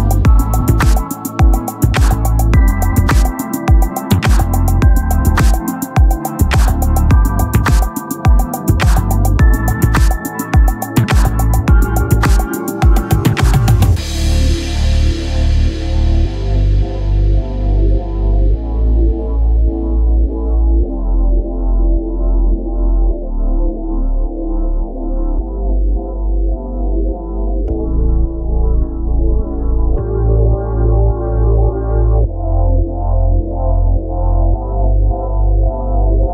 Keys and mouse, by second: 5.6 click, 13.3 right click, 15.7 click, 17.5 click, 21.8 click, 27.3 click, 32.9 shift+click.